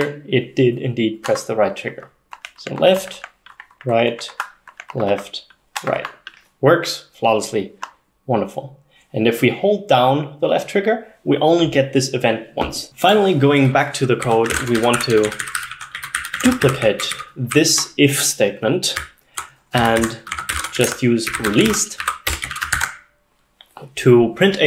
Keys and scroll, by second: 14.0-23.1 typing.